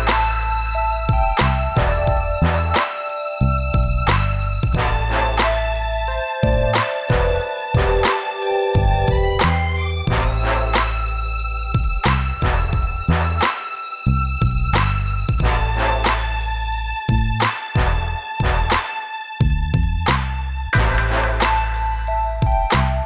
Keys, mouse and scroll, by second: 1.4 click, 9.1 click, 9.2 click, 9.7 click, 9.9 click, 12.4 shift+Return, 13.0 middle click, 14.3 click, 15.4 middle click, 16.3 scroll down 1, 17.5 click, 18.9 click, 20.4 click, 22.6 click.